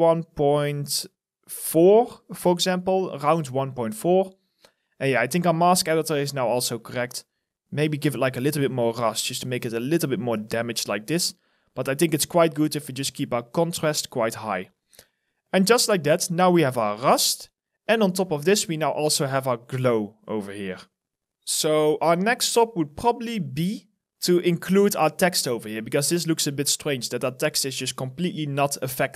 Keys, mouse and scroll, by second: 2.4 alt+click, 4.2-4.8 scroll down 1, 15.1 alt+click, 16.0 alt+middle click, 16.4 alt+right click, 17.5 alt+click, 18.9 scroll up 1, 23.3 alt+right click, 24.3 alt+click, 25.0 alt+middle click, 25.3 alt+right click.